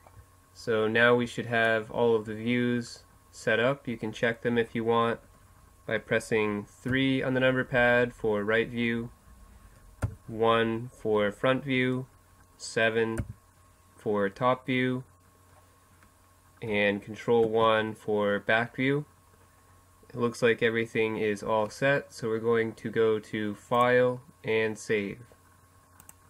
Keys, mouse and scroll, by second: 4.7 KP_3, 7.8 KP_1, 10.9 KP_7, 15.2 ctrl+KP_1, 16.4-18.4 middle drag, 21.5-24.1 drag.